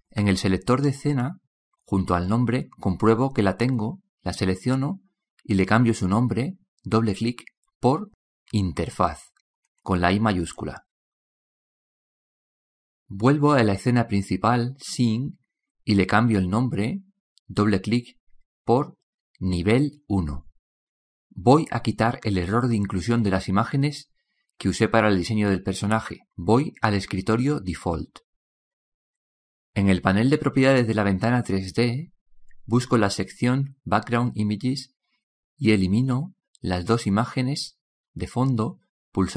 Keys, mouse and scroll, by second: 0.0 ctrl+Up, 4.8-5.4 drag, 14.3 click, 28.4-29.6 drag, 31.6-33.5 drag, 35.2-37.1 drag.